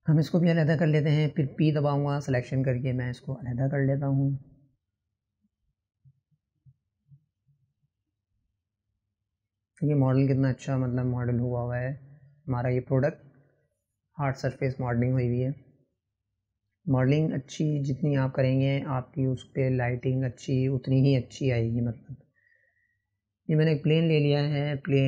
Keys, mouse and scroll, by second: 0.2-0.6 ctrl+KP_Subtract, 1.8 middle click, 2.5 KP_Decimal, 3.2-5.1 middle drag, 7.5-8.2 scroll down 10, 8.2-9.3 middle drag, 9.3 scroll down 2, 10.8 drag, 11.0 scroll down 1, 11.3 middle click, 11.8 click, 12.4 click, 14.7-21.2 drag, 23.8-24.6 drag.